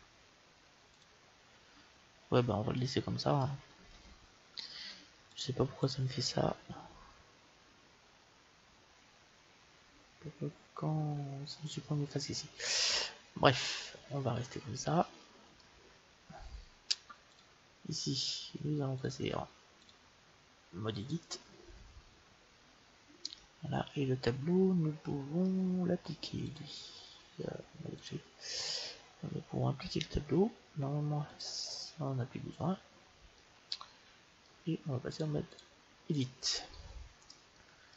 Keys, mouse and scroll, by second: 0.9-2.8 drag, 3.8 ctrl+z, 5.4-7.7 drag, 10.3-15.7 middle drag, 17.3-19.3 drag, 19.8-21.7 drag, 23.4 middle click, 26.5-29.7 drag, 31.3-33.2 drag, 33.4-35.2 middle drag, 35.2-37.2 drag, 37.5-37.9 middle drag.